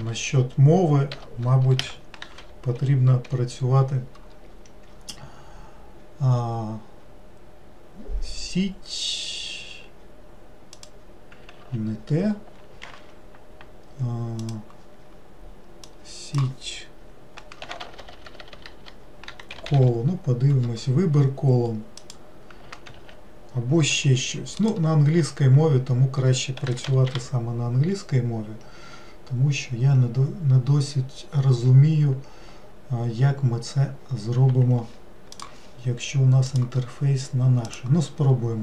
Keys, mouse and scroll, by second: 0.0 BackSpace, 0.1 BackSpace, 18.0 BackSpace, 18.1 BackSpace, 36.5-38.6 drag.